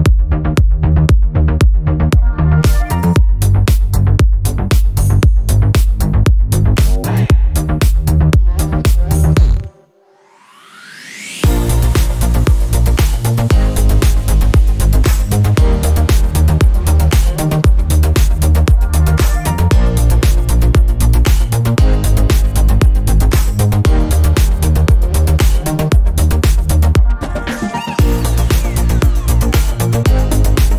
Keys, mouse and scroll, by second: 0.4 click, 1.4 click, 1.9 click, 2.2 click, 2.6 click, 2.9 click, 3.1 click, 3.6 shift+click, 3.8 click, 4.0 click, 4.2 -, 4.3 click, 4.7 click, 5.1 click, 5.2 click, 5.6 click, 5.9 click, 6.2 middle click, 6.5 middle click, 7.3 drag, 7.5 drag, 7.7-8.5 drag, 8.7 click, 9.2 click, 9.4 click, 9.8 click, 10.0 click, 10.2 click, 10.6 click, 10.8 drag, 11.0 click, 11.8 drag, 12.0 drag, 12.3 click, 12.5 click, 13.2 click, 13.6 click, 13.7 click, 13.9 click, 14.4 click, 14.6 -, 14.7 click, 15.2 click, 15.4 drag, 15.6 click, 16.1 click, 16.3 drag, 16.5 click, 16.6 click, 16.7 drag, 16.9 click, 17.0 click, 17.2 click, 17.4 click, 17.7 click, 17.8 click, 17.9 click, 18.2 click, 20.9 -, 21.0 drag, 21.6 drag, 21.8 click, 22.0 click, 22.4 click, 22.5 click, 22.7 drag, 22.9 click, 23.4 click, 23.4 middle click, 23.6 drag, 23.8 click, 24.1 middle click, 24.3 click, 24.4 middle click, 24.6 click, 24.8 click, 25.1 click, 25.2 drag, 25.4 click, 25.7 click, 25.8 click, 26.1 click, 26.3 drag, 26.5 click, 26.7 click, 27.0 drag, 27.4 drag, 27.7 click, 27.8 middle drag, 28.0 drag, 28.2 click, 28.2 middle click, 28.4 click, 28.5 click, 28.8 middle click, 28.8 -, 28.9 middle click, 28.9 -, 29.0 click, 29.7 click, 30.3 click.